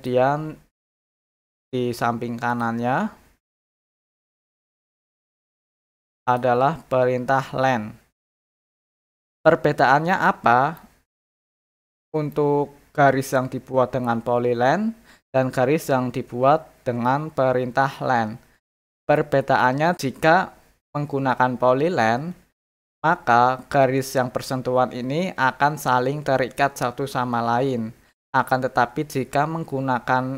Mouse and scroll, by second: 2.5 click, 3.6 click, 5.1 click, 6.2 click, 8.2 middle click, 8.5 scroll up 2, 8.6 middle click, 9.0 middle click, 9.0 scroll down 2, 10.0 scroll down 1, 10.1 middle click, 10.8 scroll up 1, 11.3 scroll down 1, 11.9 middle click.